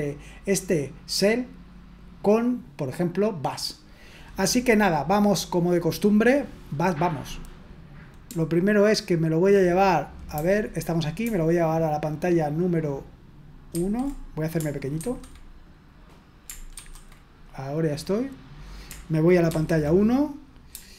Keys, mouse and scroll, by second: 10.3 super+h, 13.8 super+!, 15.0 ctrl+2, 16.7 ctrl+1, 19.5 super+1.